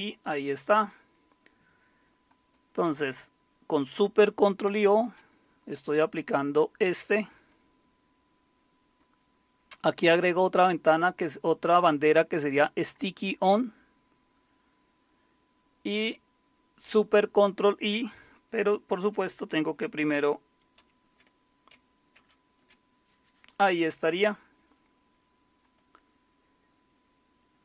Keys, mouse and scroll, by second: 2.3 click, 2.8 click, 4.7 ctrl+super+o, 7.3 click, 20.8 super+c, 22.2 ctrl+super+i, 25.6 click.